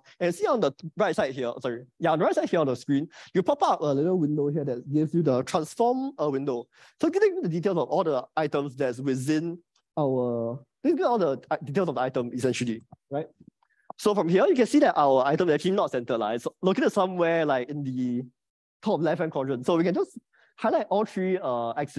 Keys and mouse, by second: 15.2-21.5 drag.